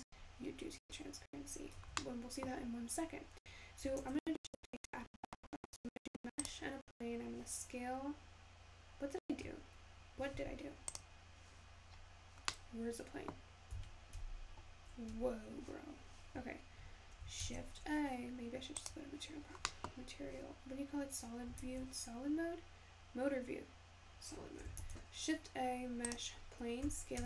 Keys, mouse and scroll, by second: 3.7-6.1 shift+middle drag, 6.1 shift+a, 9.7-11.6 scroll down 2.